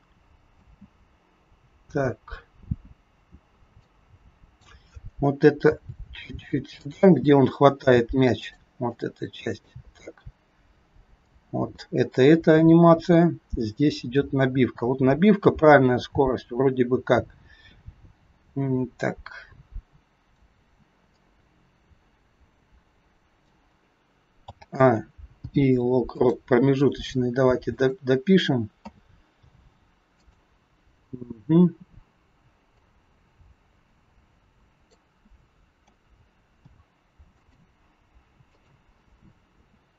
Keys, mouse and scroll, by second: 0.6 space, 3.7 click, 5.7 g, 8.3 click, 8.9 click, 9.9-11.2 scroll up 6, 11.2 click, 13.2 click, 21.1 click, 25.3 a, 25.3 i, 27.7 click, 28.8 a, 29.3 i, 32.7 click, 35.8 a, 36.4 i, 38.4 click, 39.6 a.